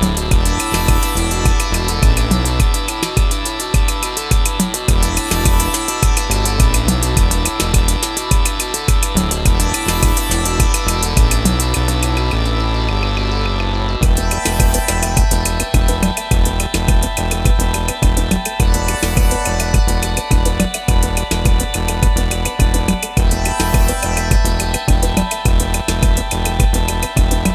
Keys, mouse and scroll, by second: 0.2 ctrl+t, 1.3 alt+shift+click, 5.9 alt+shift+click, 10.6 alt+shift+click, 12.7 Return.